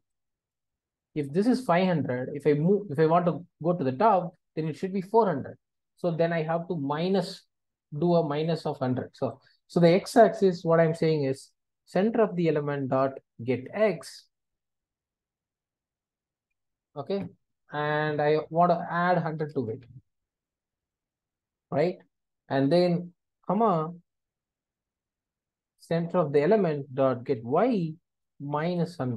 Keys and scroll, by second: 12.2 Return, 27.5 Return.